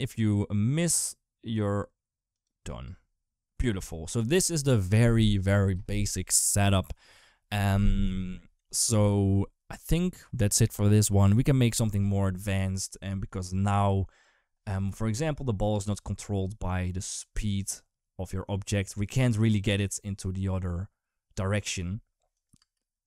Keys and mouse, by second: 2.6 space, 14.0 click, 14.9 space, 15.5 g, 22.4 space.